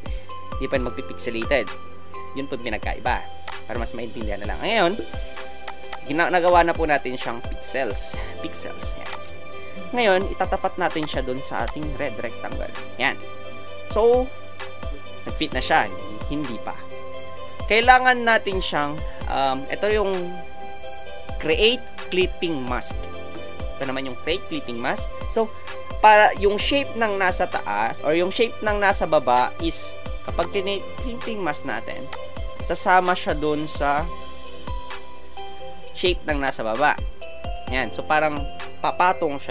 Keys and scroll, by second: 1.4 Return.